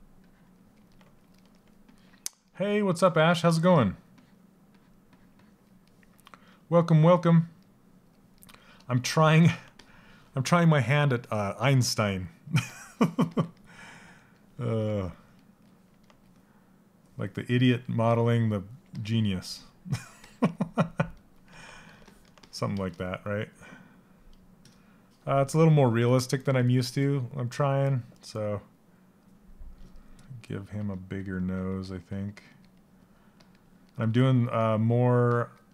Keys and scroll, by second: 30.4 s.